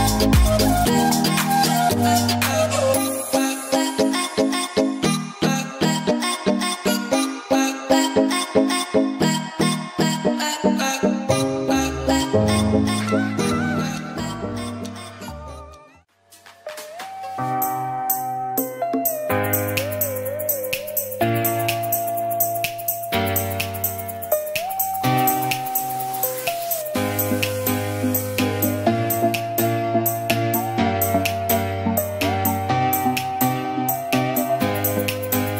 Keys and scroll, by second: 3.6 ctrl+d, 5.6 s, 27.2 s, 27.4 ctrl+=, 28.0 space, 31.1 space, 34.2 space.